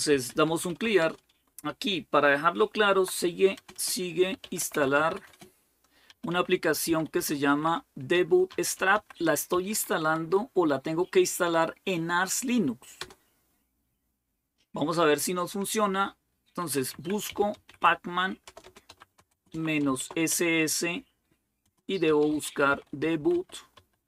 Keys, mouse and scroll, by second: 0.0-1.3 typing, 2.5-9.9 typing, 11.0-11.8 typing, 12.9 Return, 16.3-24.0 typing.